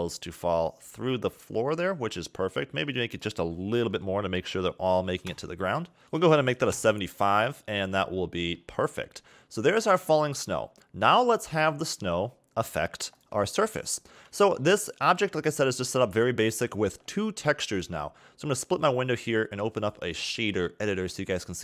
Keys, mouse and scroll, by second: 3.0 click, 5.9 click, 7.4-7.7 scroll down 4, 7.7 middle click, 8.4-8.7 scroll up 3, 9.9-10.3 scroll up 2, 10.9-12.9 scroll down 2, 12.9 click, 13.7 shift+middle click, 14.8-15.4 scroll down 1, 15.4 scroll up 2, 17.5 click, 19.5 click.